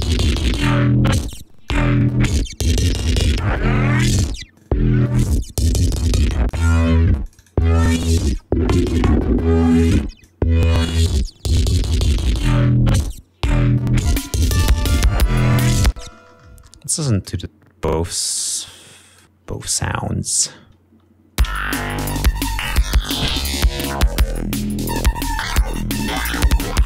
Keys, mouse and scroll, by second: 1.1 click, 4.7-6.8 drag, 7.3-8.5 drag, 8.9-10.4 drag, 12.7 click, 13.7 click, 14.5 ctrl+scroll down 2, 21.1 ctrl+s, 22.1 space, 22.8 ctrl+scroll up 2, 24.2 ctrl+scroll up 3, 26.3 click.